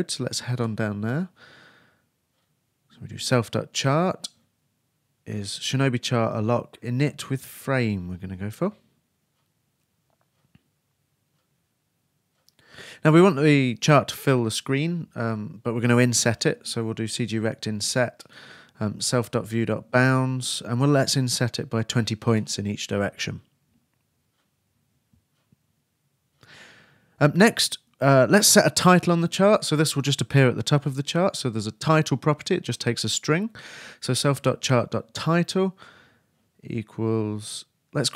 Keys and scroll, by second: 5.9-7.2 typing, 14.2-15.3 typing, 35.5-37.5 typing.